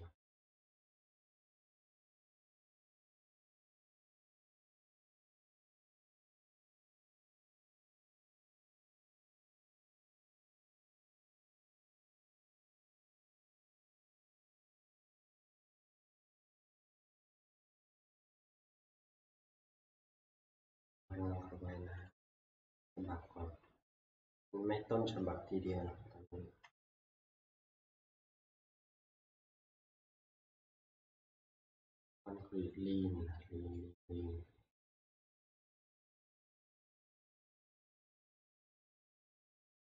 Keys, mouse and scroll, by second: 5.1 click, 7.7-10.2 drag, 10.8-15.9 drag, 18.9-19.8 scroll, 20.5-22.1 shift+scroll, 22.1-23.2 scroll, 23.2 scroll, 24.0-24.5 shift+scroll, 24.5 scroll, 26.7 F11, 28.7 scroll, 28.8 shift+middle click, 32.0 click, 32.0 middle click, 32.3 click, 32.3-33.7 scroll, 37.2 click, 38.4 click, 39.2 scroll.